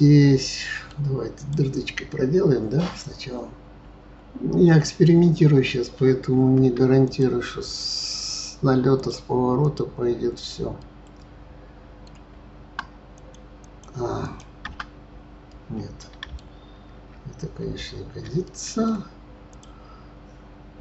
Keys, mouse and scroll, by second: 0.3-1.3 middle drag, 1.3 click, 6.6 Tab, 7.0 click, 9.0 click, 9.6 click, 10.8-12.3 middle drag, 12.3 Tab, 13.1 click, 13.6 click, 14.2 click, 14.2 right click, 14.6 Tab, 15.5-17.0 middle drag, 17.0 ctrl+z, 17.6 ctrl+z, 18.4-19.5 middle drag, 19.5 click.